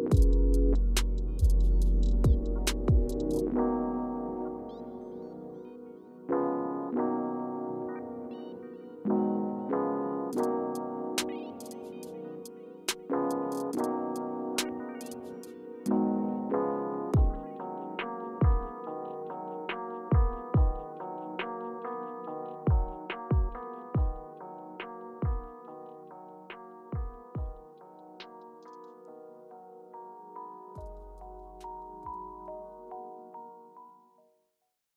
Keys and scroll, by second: 9.7 super+g, 11.9 alt+h, 11.9 alt+v, 18.8-19.2 scroll up 3.